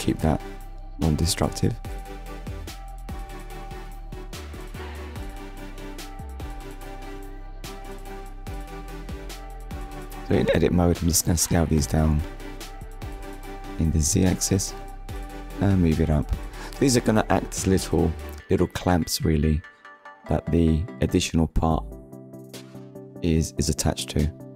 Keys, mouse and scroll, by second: 0.2 middle click, 3.9 KP_1, 4.5 scroll down 1, 4.7-5.1 scroll up 1, 5.6 click, 7.0 click, 7.9 click, 13.0 click, 14.0 Tab, 15.0 click, 18.4 middle click, 19.8 click, 20.3-20.8 scroll down 1, 21.0 shift+middle click, 21.8 middle click, 23.4 scroll up 1.